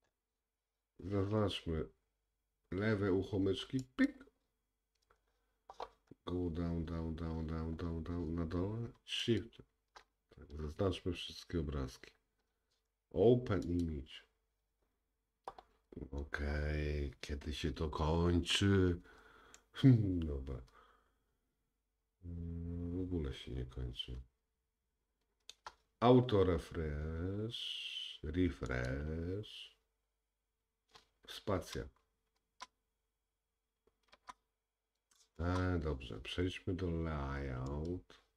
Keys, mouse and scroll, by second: 13.3-19.1 drag, 19.6 shift+middle click, 25.7-28.9 drag, 32.4 space, 34.2 space, 35.4 space, 37.8 click.